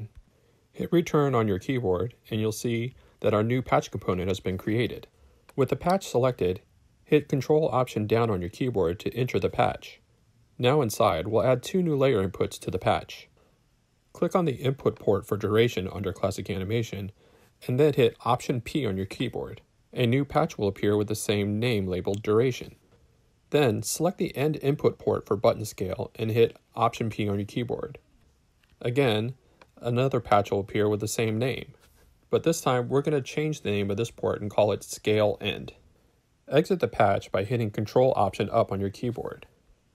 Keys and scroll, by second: 0.0-1.1 typing, 7.7 ctrl+alt+Down, 17.8 alt+p, 28.4 alt+p, 32.6 shift+Return, 33.6 shift+Left, 33.8-35.1 typing, 35.4 Return, 38.2 alt+shift+Up.